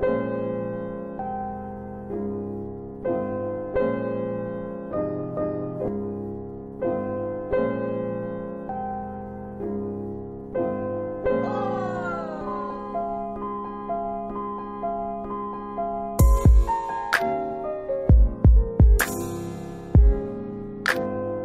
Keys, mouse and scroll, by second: 2.0 click, 5.4 middle click, 5.8 F4, 10.3 click, 12.0 alt+space, 12.5 alt+w, 12.9 alt+w, 13.8 F4, 14.8 scroll up 1, 15.5 click, 17.2 click, 17.5 scroll down 3, 18.6 click, 21.3 right click.